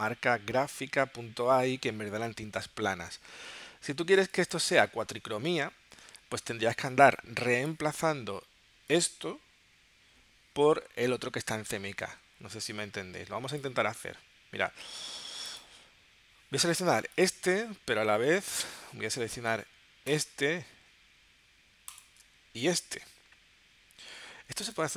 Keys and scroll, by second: 4.2 space.